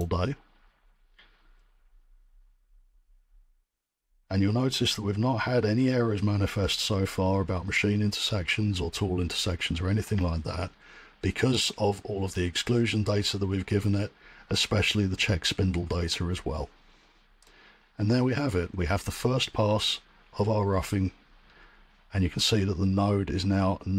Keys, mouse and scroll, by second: 0.8-4.4 middle drag, 4.4-4.9 drag.